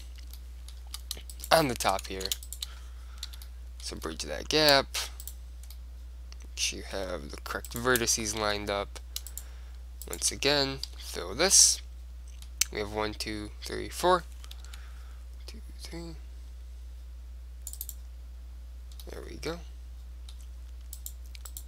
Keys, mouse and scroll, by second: 0.5-2.2 drag, 2.2 middle click, 2.4 ctrl+z, 3.4 f, 3.6 click, 4.3 middle click, 5.3-7.0 right drag, 7.1 middle click, 7.8-11.7 right drag, 8.6 f, 11.1 f, 11.7-13.3 middle drag, 12.1 right click, 14.8 ctrl+r, 18.1-19.9 drag, 19.1-20.3 middle drag, 21.1-21.6 right drag.